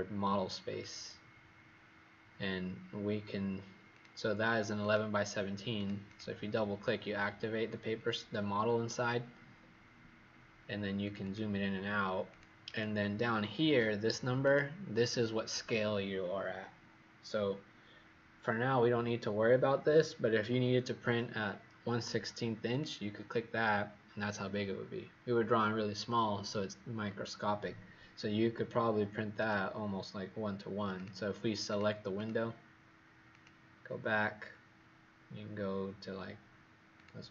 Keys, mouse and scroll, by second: 2.4 scroll down 1, 3.9 click, 6.0 click, 7.4 scroll down 1, 8.4-9.5 scroll up 3, 9.5 scroll down 1, 11.0 click, 11.2 click, 12.2 click, 12.6 click, 14.4 click, 32.1 click, 33.3 click.